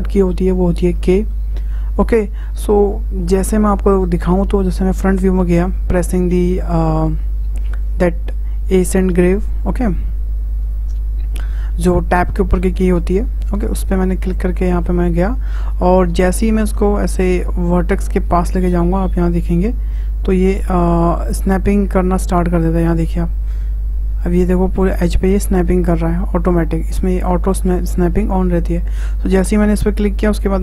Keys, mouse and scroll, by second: 7.2 `, 14.1-14.6 scroll up 2, 14.6-17.6 shift+middle drag, 21.6-24.6 drag.